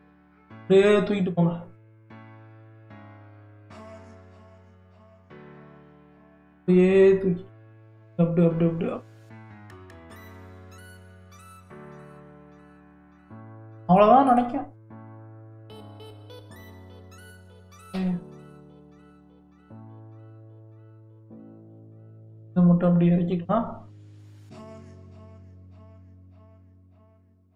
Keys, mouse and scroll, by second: 3.9-5.1 shift+middle drag, 5.1 click, 6.5 g, 13.6-14.0 scroll up 1, 14.0-15.1 shift+middle drag, 15.1 click, 16.1 scroll up 4, 16.8-18.0 shift+middle drag, 18.0 g, 20.8 click, 22.2 g, 24.6 click, 25.7 g.